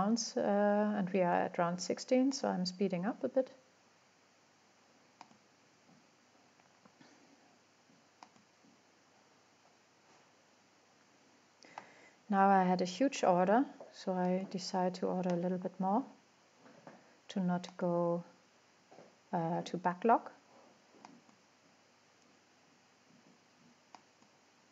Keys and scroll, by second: 12.7 1, 14.7-15.4 typing.